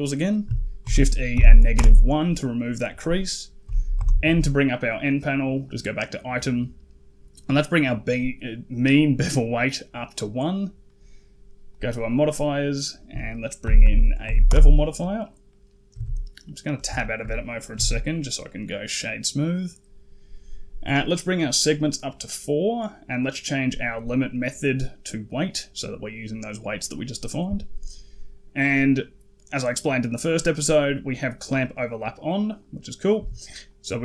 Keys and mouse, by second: 0.7 shift+e, 3.8 n, 5.5 click, 9.2 click, 11.5 click, 12.6-14.3 drag, 15.3 middle click, 15.8 Tab, 16.3 middle drag, 16.8 shift+middle drag, 17.6 q, 21.3 click, 21.5 click, 23.9-24.9 drag, 28.5 click, 32.4 click, 33.6-34.0 drag.